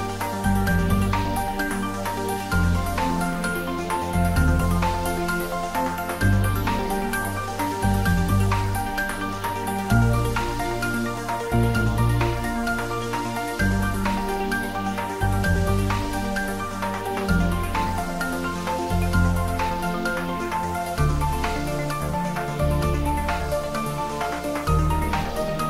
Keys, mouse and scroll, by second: 0.1 click, 0.9 ctrl+s, 1.5 s, 1.6 middle click, 2.7 click, 2.9 ctrl+z, 3.4 s, 5.3 click, 6.5-7.5 typing, 7.8 ctrl+middle click, 8.5 shift+middle click, 9.1 ctrl+middle click, 9.5 Tab, 10.8 click, 11.6 Tab, 12.4 1, 13.0 shift+z, 13.4 click, 14.5-16.9 drag, 16.6-17.7 typing, 21.8 click, 22.1 Tab, 23.2 ctrl+middle click, 24.1-25.1 typing.